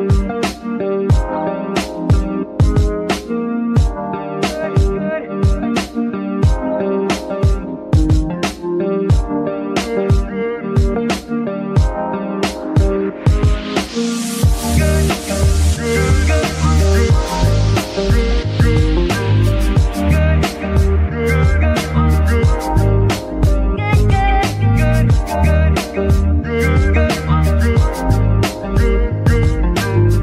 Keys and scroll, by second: 14.5 KP_1, 14.7 KP_0, 14.8 KP_0, 15.2 Return, 18.9 ctrl+Tab, 19.3 ctrl+shift+a, 22.0 ctrl+alt+KP_0, 26.1 ctrl+shift+Tab, 26.9 ctrl+p, 28.0 space.